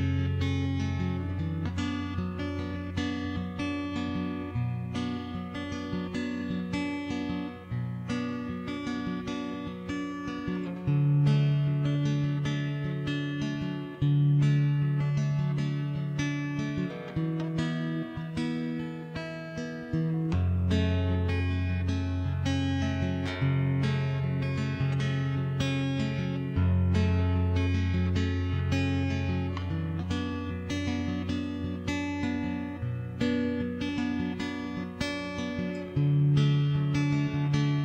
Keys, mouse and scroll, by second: 0.5-1.9 right drag, 0.9 middle click, 1.5 middle click, 2.0 right click, 2.9 middle click, 4.3 ctrl+shift+b, 5.1 click, 5.2 middle click, 6.1 click, 6.7 click, 7.3 click, 7.7 middle click, 8.9 click, 9.9 click, 10.7 click, 11.1 KP_0, 11.2 middle click, 11.9 ctrl+s, 12.2 Tab, 12.4 alt+c, 12.9 shift+space, 14.1-15.9 drag, 15.9 middle click, 16.7 shift+space, 17.1 z, 17.7 ctrl+KP_3, 18.3 shift+space, 19.6 middle click, 20.3 click, 20.9 middle click, 23.1 KP_0, 23.5 shift+space, 24.5 ctrl+s, 25.0 middle click, 25.6 middle click, 26.8-27.9 middle drag, 28.1 middle click, 29.7 alt+c, 29.9 middle click, 30.9 alt+h, 31.0 middle click, 31.5 click, 31.6 right click, 32.0 middle click, 33.4 right click, 33.6 shift+space, 33.8 shift+d, 34.3 m, 34.9 ctrl+s, 35.1 right click, 35.9 Escape, 36.1 middle click, 36.6 shift+space, 37.6 click.